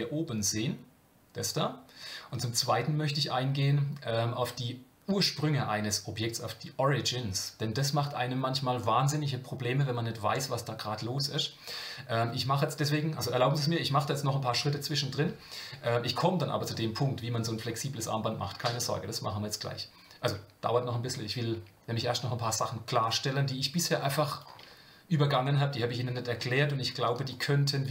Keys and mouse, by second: 21.5 Tab, 23.1-27.9 drag.